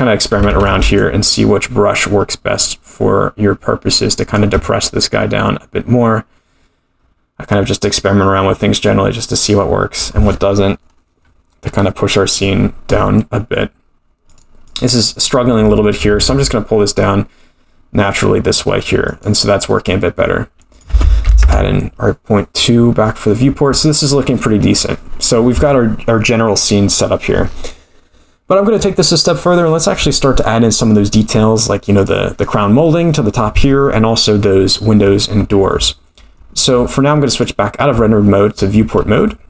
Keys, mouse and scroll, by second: 0.7 ctrl+z, 1.1-4.6 shift+drag, 7.0-7.5 scroll down 2, 10.0 scroll down 2, 11.3-12.6 scroll up 9, 14.3 click, 14.7-15.4 drag, 16.1 g, 20.7-23.2 drag, 32.0 click, 37.4 click, 38.4-39.4 scroll down 5.